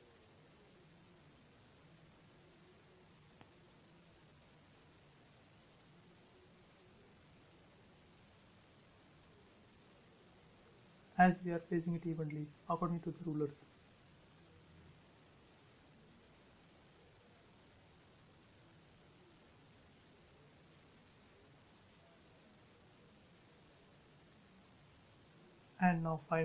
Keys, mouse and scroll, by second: 0.1-0.5 typing, 0.8 Return, 1.9 BackSpace, 2.5 click, 3.1 scroll up 1, 4.1 click, 4.4 scroll down 1, 4.5 space, 5.8 click, 7.9 typing, 8.8 click, 9.2-9.6 scroll up 1, 10.7 click, 11.2-11.9 shift+scroll down 2, 12.1 shift+middle click, 12.9 scroll up 1, 13.2-14.6 middle drag, 14.6 scroll down 1, 16.5 space, 18.1 click, 18.9-19.3 scroll up 1, 20.5 typing, 21.8 click, 21.9 click, 22.1 scroll up 1, 22.7-24.7 middle drag, 24.7 click, 24.8 space, 24.9 scroll down 1.